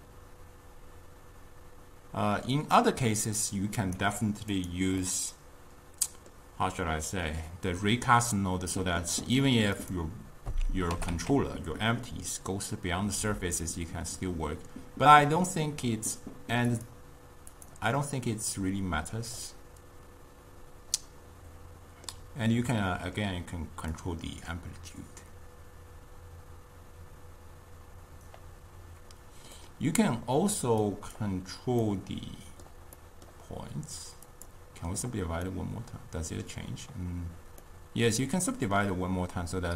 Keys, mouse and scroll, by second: 4.6 click, 5.1-9.9 middle drag, 9.9-11.2 drag, 11.2 g, 17.6 click, 19.5-24.0 middle drag, 24.0-27.1 drag, 29.6-30.9 middle drag, 30.9 click, 31.9-34.4 middle drag, 34.4-35.6 drag, 35.6-39.7 middle drag.